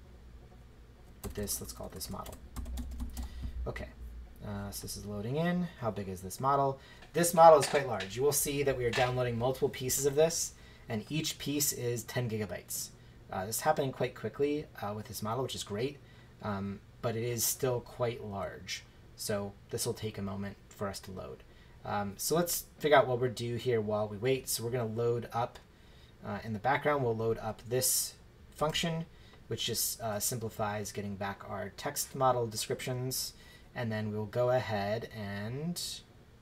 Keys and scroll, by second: 1.2 BackSpace, 2.3-3.6 typing, 28.6 shift+Return.